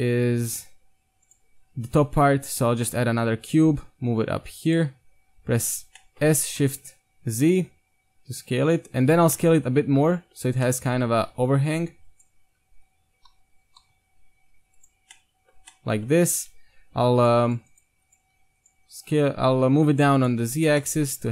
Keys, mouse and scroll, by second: 3.1-4.7 middle drag, 3.1 g, 4.8 z, 5.8 z, 6.0-6.4 middle drag, 6.2 s, 9.5-10.0 middle drag, 10.2-12.1 middle drag, 11.2 s, 12.2 middle click, 12.7 KP_1, 13.7 s, 15.1-15.9 middle drag, 15.6 Tab, 16.2 Tab, 16.5 KP_1, 16.8 Tab, 17.5-20.4 right drag, 18.3 z, 18.8 g, 20.4 z, 20.7 Tab, 20.8-21.3 middle drag.